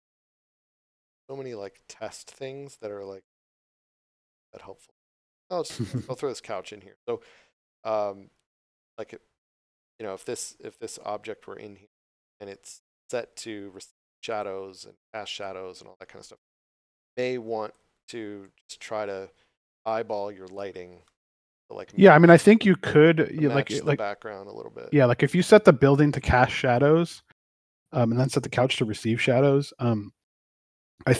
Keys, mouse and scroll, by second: 4.0 scroll down 1, 5.0 scroll up 1, 7.5 right click, 8.4 click, 11.0 click, 12.9 scroll down 1, 14.3 click, 17.9 scroll down 1, 18.4 click, 22.4 click, 30.0 click.